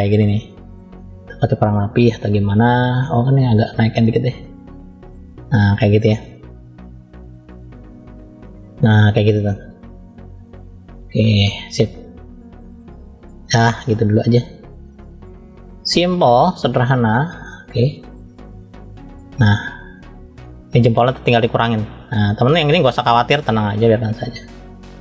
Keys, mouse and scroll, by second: 0.3 click, 1.2 click, 1.6 middle click, 2.7 click, 5.6 middle click, 6.4 click, 7.6 middle click, 8.5 click, 9.1 middle click, 10.5 click, 12.1 click, 13.1 click, 13.5 middle click, 14.6 click, 15.3 middle click, 16.8 click, 18.6 scroll down 1, 19.4 middle click, 19.4 scroll down 1, 21.5 middle click, 23.2 click, 24.4 middle click.